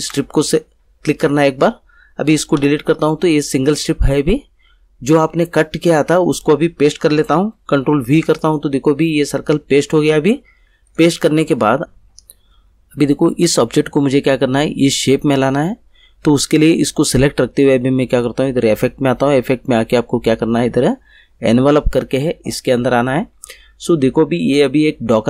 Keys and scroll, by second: 2.5 Delete, 8.0 ctrl+v.